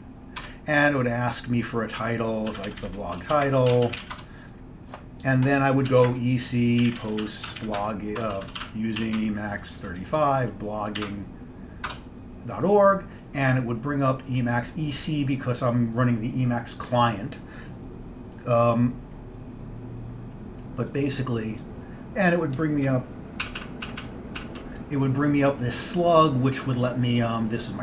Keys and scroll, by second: 0.5 Return, 2.4-4.6 typing, 5.7-12.0 typing, 12.0 Return, 23.5 ctrl+alt+=, 23.7 ctrl+alt+=, 23.9 ctrl+alt+=, 24.1 ctrl+alt+=, 24.5 ctrl+alt+=.